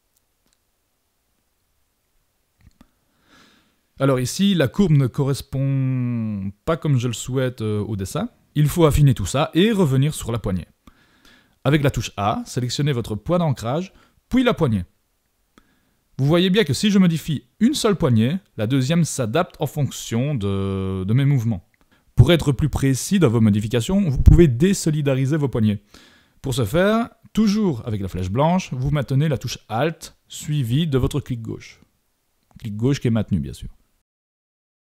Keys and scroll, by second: 9.7 super+=.